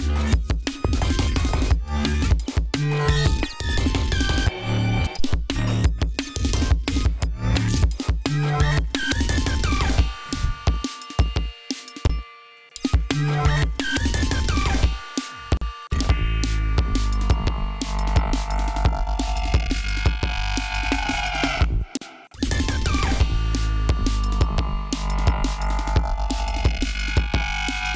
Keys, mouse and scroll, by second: 0.4-0.7 scroll down 1, 1.0-1.3 scroll down 2, 1.8 scroll up 2, 2.9 scroll up 2, 4.6-5.8 drag, 6.2 click, 7.5-8.8 drag, 9.0-9.3 ctrl+scroll up 1, 12.4 space, 12.9 click, 13.6-15.0 scroll up 2, 16.0 space, 16.2 click, 17.4-18.7 scroll down 6, 18.8-19.3 scroll up 2, 19.5 scroll up 2, 20.0 click, 20.9-22.4 drag, 22.4 space, 22.6 click, 25.0 ctrl+scroll down 2, 26.3 click, 26.7 ctrl+click, 27.0 ctrl+click, 27.8 click.